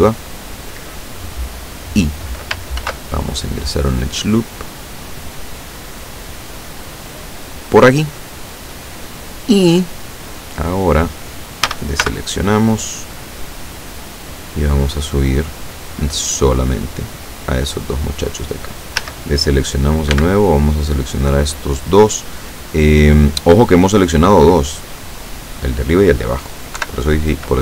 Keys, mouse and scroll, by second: 2.9 ctrl+r, 4.1 click, 7.3 click, 11.7 a, 12.1 b, 13.2-14.7 drag, 15.6-18.1 drag, 19.0 a, 20.2 b, 20.5 click, 21.9-23.6 drag, 24.3 middle click, 25.0 scroll down 2, 26.8 KP_7, 27.5-27.6 scroll up 2.